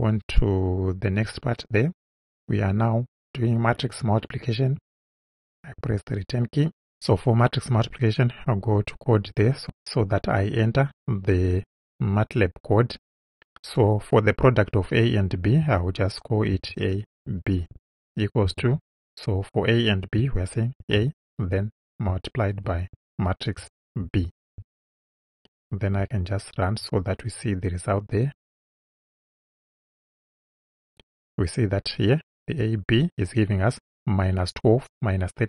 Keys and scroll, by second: 5.8 Return, 16.5 shift+a, 17.3 shift+b, 18.5 =, 20.8 shift+a, 22.7 shift+8, 24.0 shift+b.